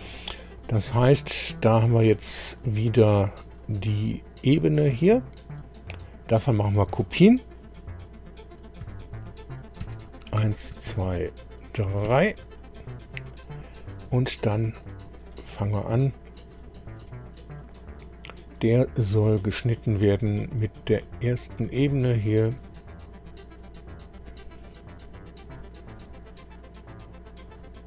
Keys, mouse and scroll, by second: 2.7 scroll up 2, 3.7 scroll up 2, 4.6 click, 8.8 ctrl+c, 9.8 ctrl+v, 10.7 ctrl+v, 12.1 ctrl+v, 13.0-13.4 scroll down 2, 13.6 scroll down 2, 14.5 scroll up 2, 15.3 click, 20.3 scroll up 2, 22.2 ctrl+click, 23.9 click, 26.3-26.7 scroll down 1, 27.5 click.